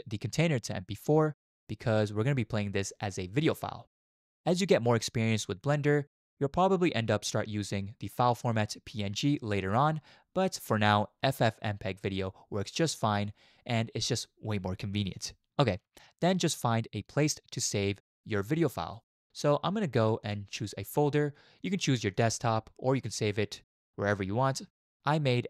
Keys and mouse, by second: 0.3-2.3 drag, 8.5-14.1 drag, 20.2 click.